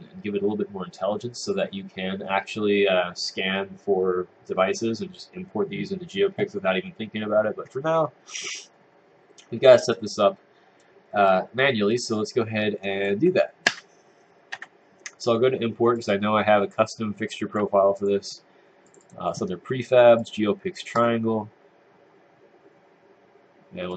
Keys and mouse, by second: 9.7 click, 11.3 click, 13.7 Tab, 14.5 Tab.